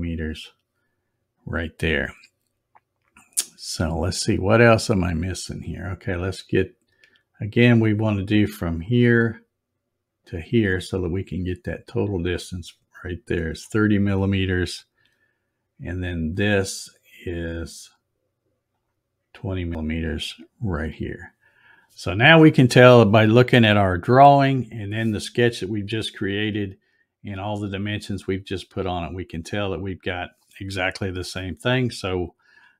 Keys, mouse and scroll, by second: 8.6 click, 10.2 click, 13.4 click, 16.7 click, 18.7 click, 20.8 click.